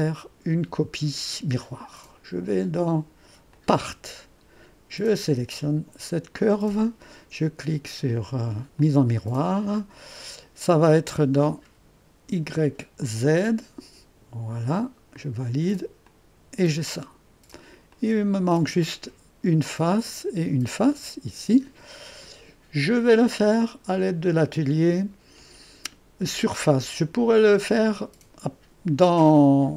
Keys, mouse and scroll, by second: 3.6 click, 5.1 click, 8.8 click, 13.1-14.8 drag, 15.2 click, 16.1-29.7 drag.